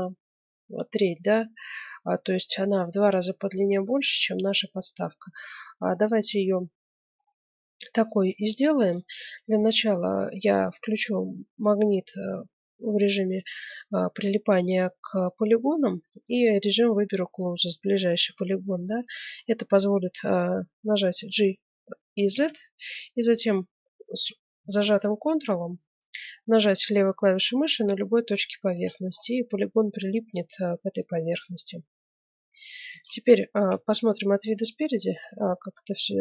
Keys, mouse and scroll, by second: 3.9 middle click, 4.2-4.6 scroll down 1, 4.6-6.7 middle drag, 6.7-7.3 scroll up 1, 7.3-12.2 middle drag, 16.2-17.9 drag, 18.9-21.3 middle drag, 21.1 g, 28.7-30.9 middle drag, 30.9-32.7 drag, 32.9 ctrl+z, 33.7 KP_1, 34.2 middle click, 35.4 z.